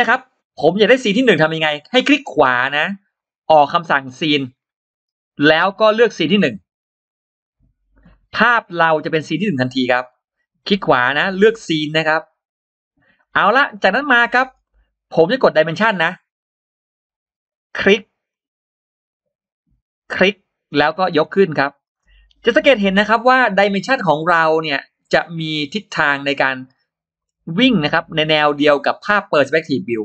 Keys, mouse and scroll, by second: 2.0 right click, 6.9 click, 8.1-8.4 scroll down 2, 8.8-9.4 scroll up 4, 9.9-10.3 scroll down 2, 10.3 right click, 13.0 click, 13.4-13.7 scroll up 2, 16.2 click, 18.1 click, 19.9 click, 21.7 click, 23.8 click, 24.9 click, 26.1 click, 26.4-26.8 scroll down 2, 27.0 scroll up 2, 29.6 click.